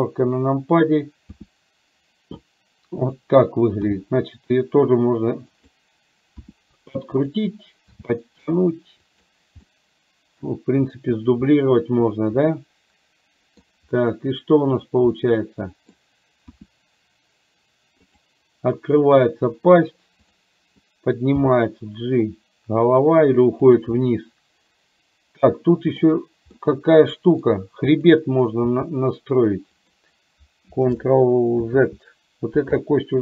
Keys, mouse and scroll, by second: 1.4 r, 3.9 g, 6.4 r, 8.0 g, 9.8 middle click, 12.7-13.8 middle drag, 14.8 click, 15.3 middle click, 16.7 r, 21.5 g, 24.0-26.0 middle drag, 26.8 middle click, 28.2 click, 28.8 g, 31.2 ctrl+Left, 31.7 ctrl+z.